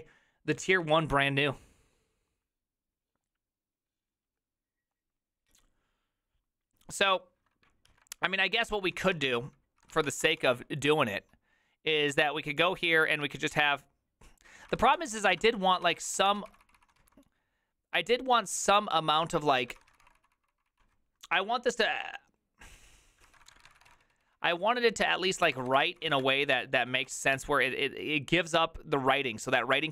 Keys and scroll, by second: 8.9 alt+{, 8.9 ctrl+a, 9.1-17.5 typing, 9.4 ctrl+c, 12.1 Return, 19.9 ctrl+c, 19.9 ctrl+:, 20.0-20.7 typing, 20.2 Return, 23.2-27.8 typing.